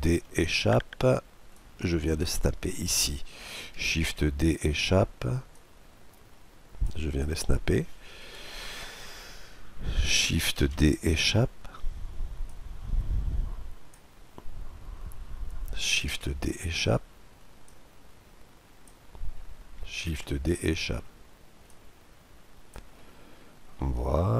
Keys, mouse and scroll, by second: 1.2-3.0 drag, 3.7 shift+d, 5.2-7.1 drag, 7.9 KP_Decimal, 8.5-10.6 middle drag, 10.3 shift+d, 12.1-13.8 drag, 14.1 middle click, 14.2-15.8 scroll down 1, 15.8-16.1 scroll down 1, 15.8 shift+d, 16.1 middle click, 17.3-19.0 drag, 19.7 shift+d, 21.3-23.0 drag, 22.6-24.3 middle drag.